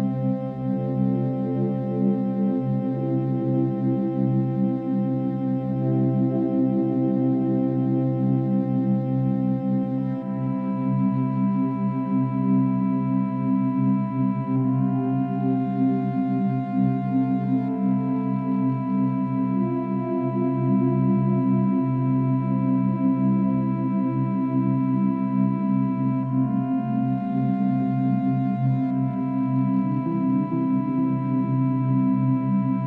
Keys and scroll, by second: 15.9 ctrl+z, 20.8 ctrl+-, 21.0 ctrl+=.